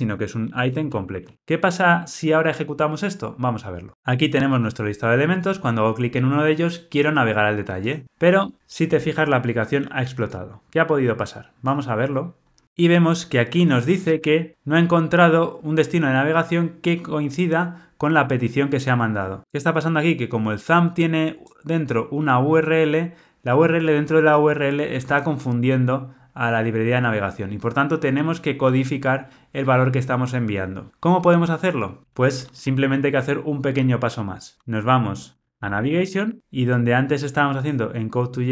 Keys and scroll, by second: 0.5 shift+F6.